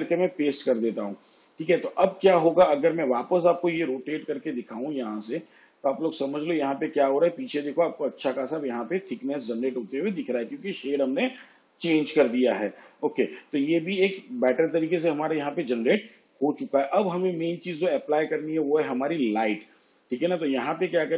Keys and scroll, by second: 14.0 ctrl+z.